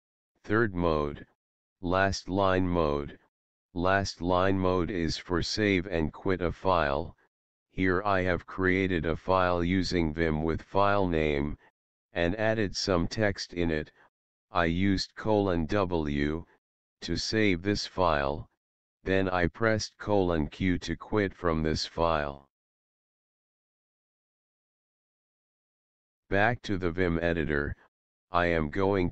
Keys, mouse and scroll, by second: 0.2 click, 11.6 Up, 14.4 Return, 18.0 shift+w, 20.6 Return, 22.2 shift+q, 23.2 Return, 23.6 click, 25.8 Tab, 26.2 Up, 26.8 Return.